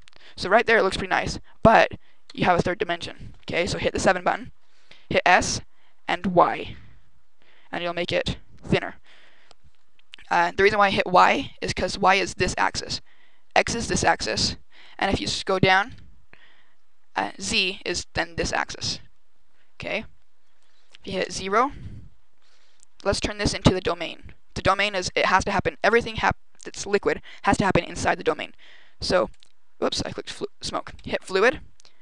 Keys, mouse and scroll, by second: 2.2 KP_7, 4.9 s, 8.6 click, 9.4-9.9 scroll down 1, 15.1-15.6 KP_2, 15.8 KP_2, 21.1 KP_0, 29.2 click, 29.9 click, 30.8 click, 31.9 click.